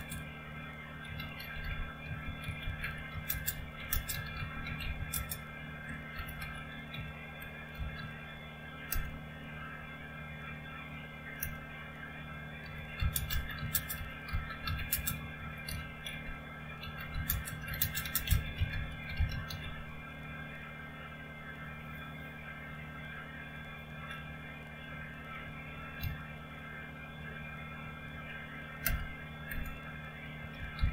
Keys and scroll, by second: 0.0-8.9 typing, 11.4-20.1 typing, 23.6 BackSpace, 24.2-24.9 Left, 25.4 Right, 25.7 Right, 25.9 s, 26.5 Right, 27.0 Right, 28.8 Return, 29.5 Return, 30.1-30.9 typing.